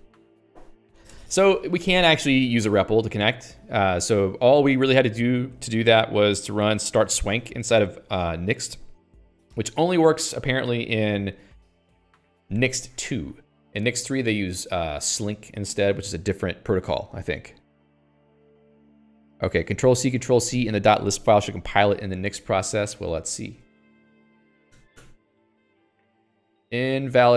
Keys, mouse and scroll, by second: 4.0 click, 22.4 click, 23.5-25.0 typing, 25.4 ctrl+c.